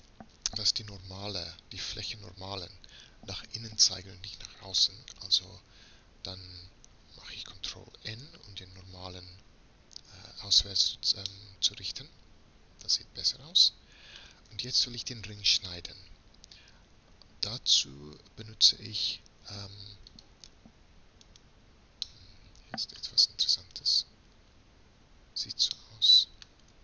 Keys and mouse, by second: 5.2 a, 7.8 ctrl+n, 11.3-13.0 middle drag, 16.0 a, 20.1-23.8 middle drag, 23.8 right click, 24.3 middle click, 24.4 right click, 24.5 middle click, 25.0 right click, 25.7 middle click.